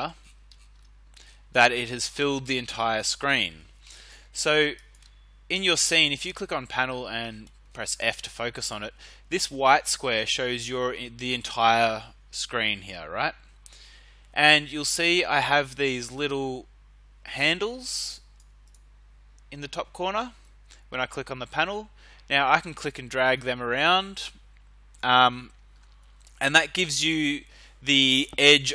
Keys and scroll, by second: 0.7 f, 6.5 f.